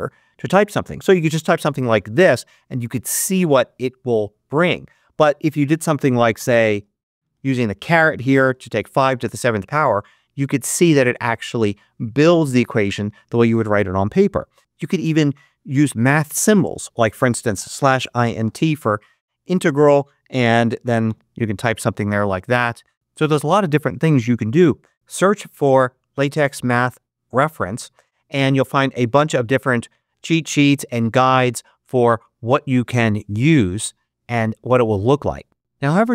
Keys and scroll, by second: 0.5-2.2 typing, 6.2 5, 7.0 shift+6, 8.3 7, 14.5 shift+=, 14.6 BackSpace, 16.3-18.8 typing, 20.9 8, 24.7 shift+0.